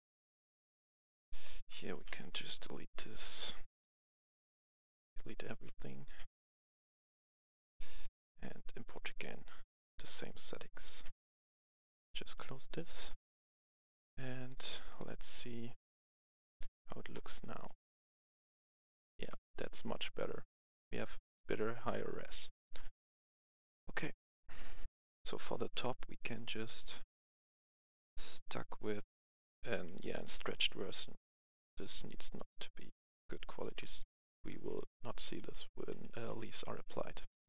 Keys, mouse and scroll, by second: 1.3 shift+click, 2.4 Delete, 3.1 click, 4.4 F11, 4.8 click, 5.3 shift+click, 6.0 Delete, 11.7 F10, 12.4 click, 16.1 click, 17.1 right click, 17.3-21.3 typing, 22.6-24.1 typing, 24.1 click, 24.8 F10, 25.2 right click, 26.7 click, 28.0-28.7 scroll down 1, 28.7 click, 29.7 right click, 30.1-30.8 typing, 30.9 right click, 32.8-37.4 typing, 33.2 right click.